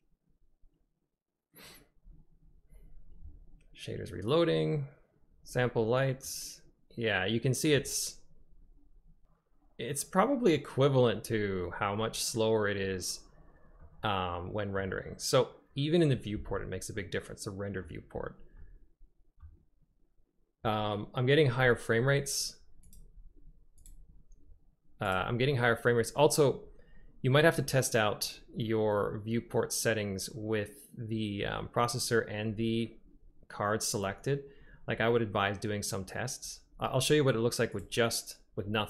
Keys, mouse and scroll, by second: 6.3 middle click, 6.6 click, 6.7-7.8 middle drag, 13.8-14.9 middle drag, 17.0-17.6 drag, 17.6 middle click, 17.7 click, 18.7-19.5 drag, 23.0-24.0 drag.